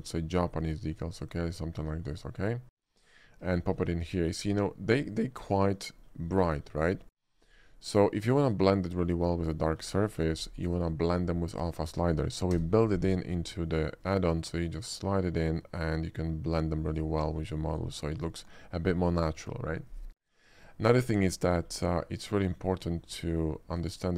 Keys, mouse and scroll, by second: 0.1 click, 1.2 click, 2.0 click, 2.8 click, 3.6 shift+middle click, 3.9 shift+middle click, 4.5 shift+middle click, 5.0-6.0 shift+middle drag, 7.1 middle drag, 7.8-9.3 middle drag, 9.6 shift+middle drag, 10.7-12.8 shift+middle drag, 12.6 d, 14.1-16.6 drag, 15.2 d, 17.0 click, 17.2 middle click, 17.4 middle click, 17.8 click, 18.4-19.5 middle drag, 20.9 middle click, 21.3 shift+middle click, 22.0 shift+middle drag, 22.6 shift+middle click, 23.0 shift+middle click, 23.7 shift+click.